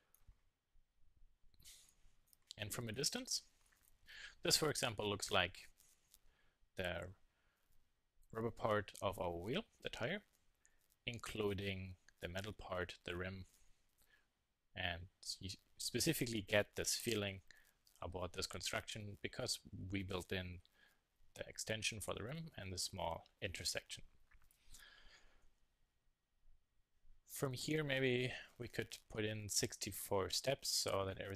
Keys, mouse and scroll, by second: 0.4 Tab, 1.9 middle click, 3.0-3.7 middle drag, 5.2 middle drag, 5.5-6.3 middle drag, 17.5-27.9 middle drag, 27.9 KP_1, 28.2 KP_3, 28.3-29.9 middle drag, 30.9 click.